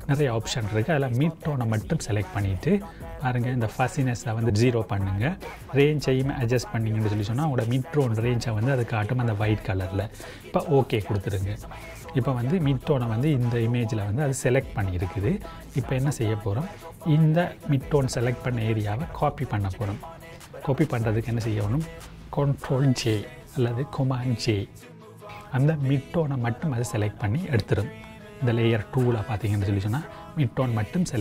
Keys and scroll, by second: 23.1 ctrl+j.